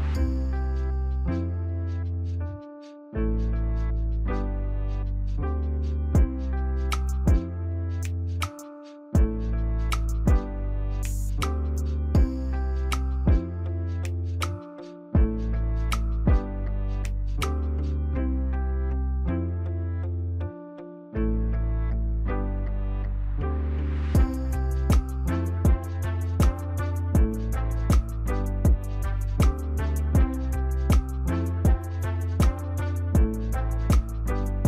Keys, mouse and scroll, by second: 33.6 ctrl+z, 34.2 ctrl+z.